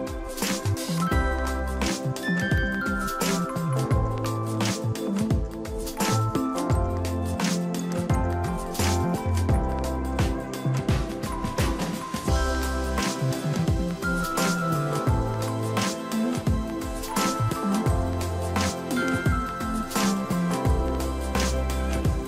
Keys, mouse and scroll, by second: 6.3 shift+click, 9.7 ctrl+a, 13.1 ctrl+d, 14.7 ctrl+j, 17.4 right click.